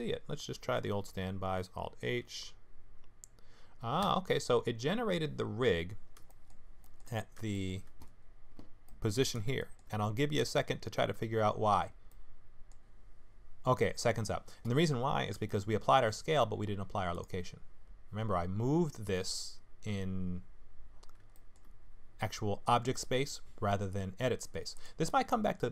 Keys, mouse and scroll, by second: 0.5 alt+h, 1.2-1.6 scroll up 3, 2.2 KP_Divide, 3.4-4.0 scroll down 1, 4.0 KP_Divide, 4.0-5.3 scroll down 1, 6.2 shift+scroll down 1, 6.3 shift+middle click, 6.8 shift+middle click, 7.1 scroll down 5, 7.5 shift+middle click, 8.9 middle click, 9.6 shift+middle click, 10.0-10.4 scroll up 4, 10.5 shift+middle click, 12.1 middle click, 13.6-15.1 scroll down 5, 15.4 shift+middle click, 17.1 click, 21.3 shift+middle click, 24.7 click.